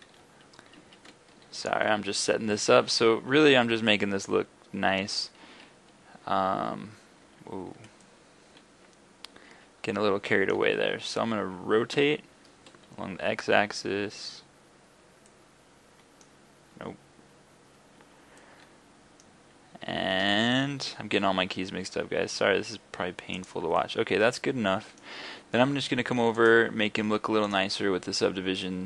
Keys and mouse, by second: 8.1-8.5 middle drag, 8.7-9.9 middle drag, 12.0 r, 18.4 middle drag, 18.6 middle click, 19.0 middle click, 19.4 x, 20.9 r, 23.5-23.9 drag, 24.0 drag, 24.4 click, 24.8 click, 26.4-28.8 drag.